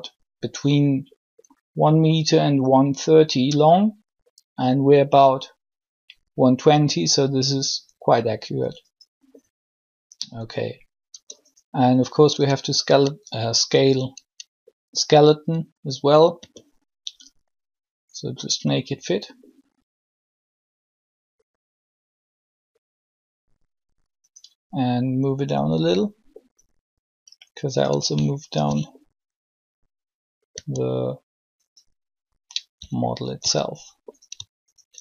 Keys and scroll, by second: 11.0 Tab, 12.3 Tab, 16.4 s, 30.5 s.